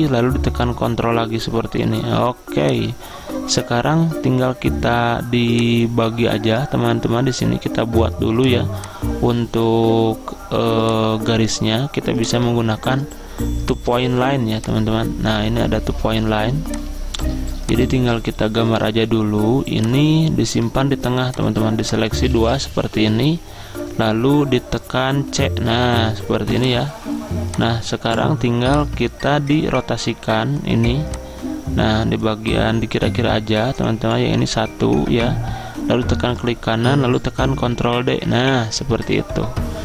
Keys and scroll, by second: 22.5 ctrl+z, 25.3 c, 37.7 ctrl+d.